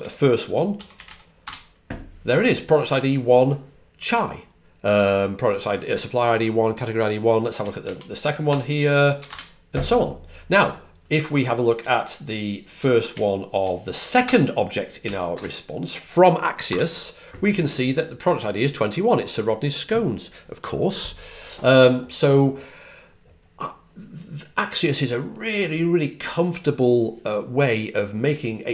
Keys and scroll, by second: 0.4-1.5 typing, 7.5 Up, 7.7 Left, 8.4 BackSpace, 9.1 1, 9.2 Return, 11.7 Up, 12.7 Up, 13.0 Left, 13.3 Left, 15.3 1, 16.6 Left.